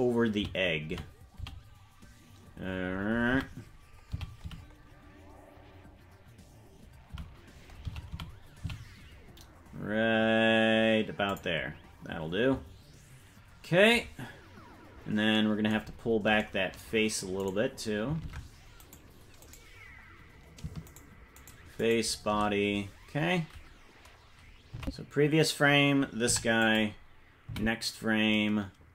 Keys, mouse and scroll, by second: 15.8 scroll down 1, 16.4-17.4 scroll down 4, 17.5 right click, 18.2 ctrl+Tab, 18.9 right click, 19.8-20.4 scroll down 5, 21.4 shift+right click, 24.8 Left, 26.3 i, 27.5 Right.